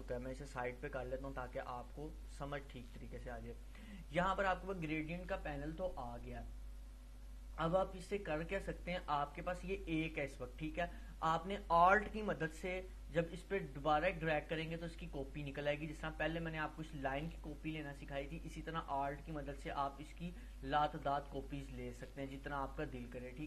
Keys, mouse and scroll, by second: 7.3-7.9 drag, 10.0-10.9 drag, 13.5-16.0 alt+drag, 19.5-21.5 drag, 21.5-22.7 alt+drag.